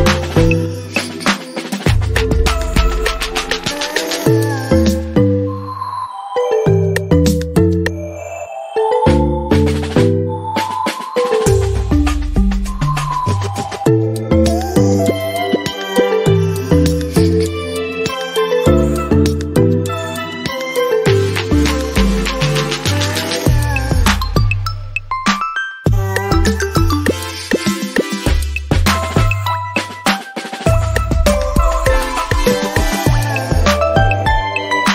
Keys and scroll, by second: 33.6 ctrl+t.